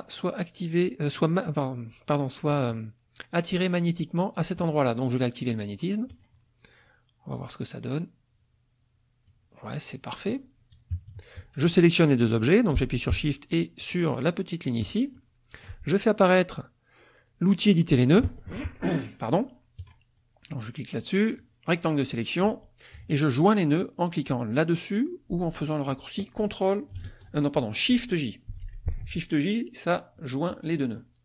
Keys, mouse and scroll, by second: 2.4 middle click, 6.1 click, 7.3-9.5 drag, 10.9 KP_Subtract, 10.9 middle click, 11.1-13.6 middle drag, 13.8 shift+click, 15.1 shift+click, 19.8 click, 20.5 click, 21.4-22.6 drag, 28.5 shift+j, 31.0 click.